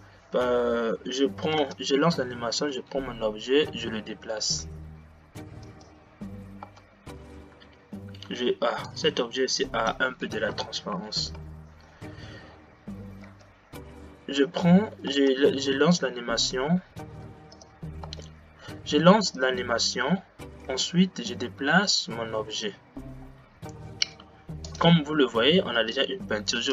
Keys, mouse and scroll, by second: 1.7 space, 2.8 g, 6.8 space, 9.2-11.5 drag, 13.5 g, 18.0 click, 18.1 space, 19.4 click, 20.9 g, 26.0 space.